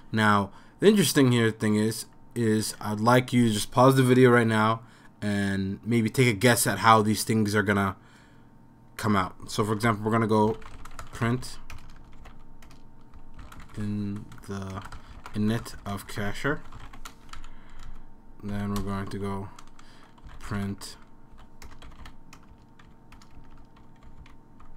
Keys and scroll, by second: 9.9 Return, 10.2-17.3 typing, 17.8 Down, 18.5 End, 18.8 Return, 20.0-24.7 typing.